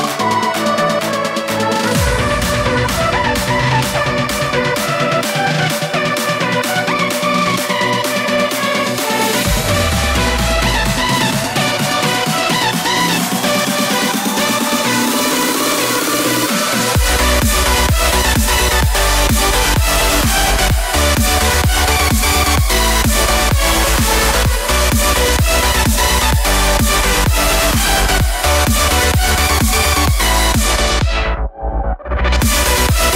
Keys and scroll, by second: 13.8 alt+space, 14.7 space.